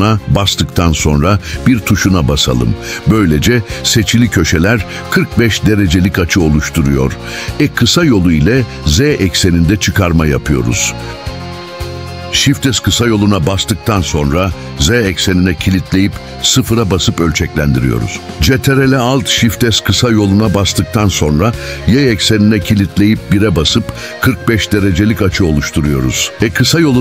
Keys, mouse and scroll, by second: 0.4 ctrl+alt+shift+s, 1.7 1, 4.7 Return, 7.2 e, 7.9 z, 8.3 z, 11.0 click, 11.7 shift+middle click, 13.9 s, 15.3 z, 16.4 0, 17.2 Return, 19.7 ctrl+alt+shift+s, 21.7 y, 24.0 1, 24.6 Return, 26.3 e.